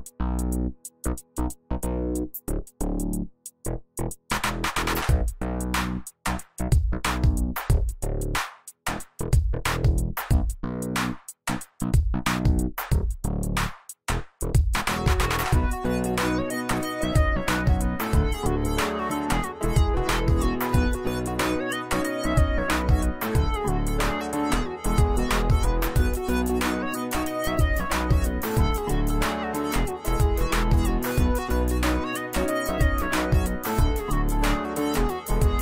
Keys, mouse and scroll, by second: 3.2 shift+click, 3.7 right click, 6.5 right click, 9.7 click, 10.6 right click, 11.7 click, 14.1 right click, 14.8 click, 17.8-18.8 alt+shift+click, 22.7 shift+click, 23.9 right click, 24.7 click, 26.7-27.6 alt+shift+drag, 34.5 click.